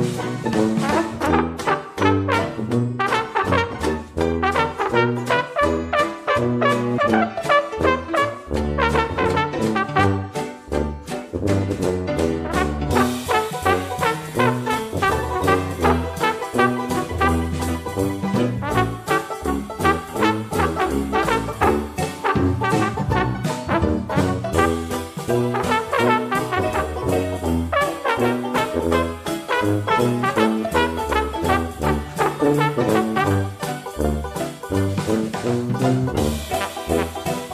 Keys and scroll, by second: 8.6 ctrl+z, 24.2 3, 26.0 Return, 32.8-33.2 typing, 35.4 typing.